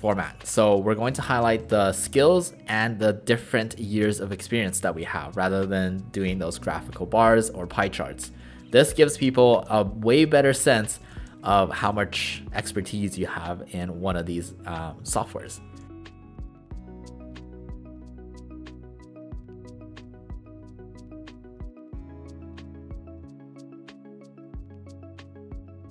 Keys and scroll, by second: 0.3 shift+=, 1.6 space, 8.8-9.6 typing, 10.9-13.3 typing, 15.7-18.5 typing, 16.7 ctrl+a, 18.0 ctrl+a, 19.0 ctrl+a, 19.3 Delete, 19.4 Delete, 19.5-25.9 typing, 20.8 Return, 22.5 ctrl+alt+shift+a, 25.7 Return.